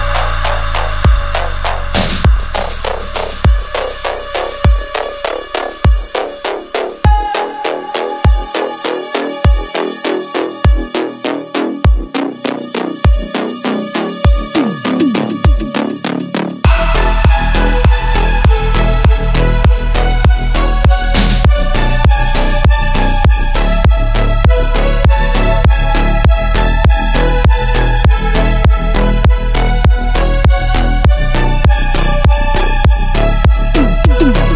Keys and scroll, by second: 0.0-0.4 typing, 2.5 -, 3.3 ctrl+z, 5.1 ctrl+z, 5.2 -, 6.1 ctrl+z, 7.3 ctrl+z, 7.4 space, 15.3 ctrl+z, 21.1 ctrl+z, 26.1 ctrl+z, 26.8 ctrl+z, 28.9 ctrl+z, 34.0 ctrl+z.